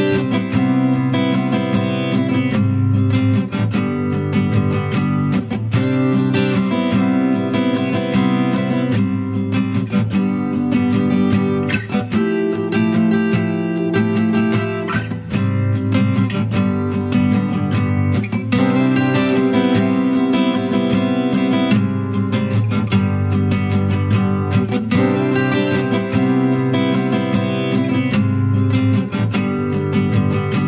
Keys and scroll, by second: 5.0-6.1 typing.